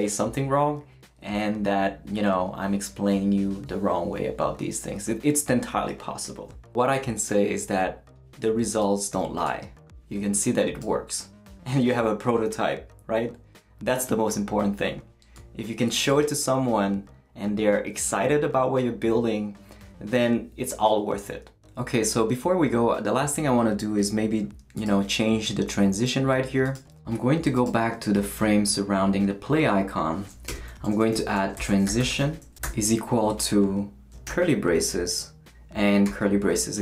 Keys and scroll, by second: 30.5 Return, 30.9-33.1 typing, 34.2 shift+[, 36.0 shift+[.